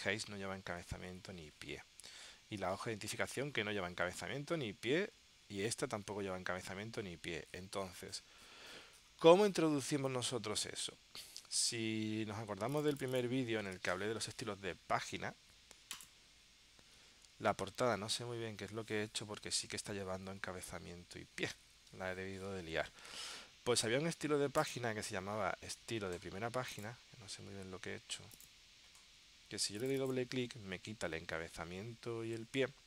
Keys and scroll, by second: 10.3 super+Tab.